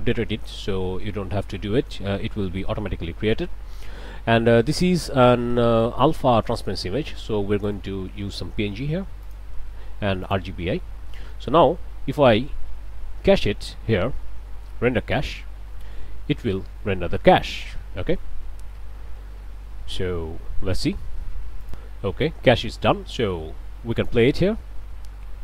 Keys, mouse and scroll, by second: 4.5 click, 7.6 click, 9.2 click, 10.3 click, 11.0 scroll up 1, 11.1 click, 15.2 click, 21.7 click, 24.0 click.